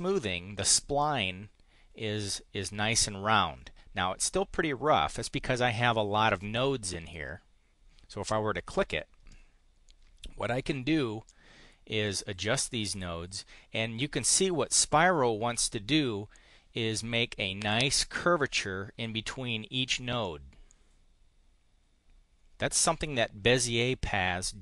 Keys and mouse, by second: 7.0 click, 11.2 click, 12.9-13.9 drag, 14.7-15.9 drag, 20.2-24.6 drag.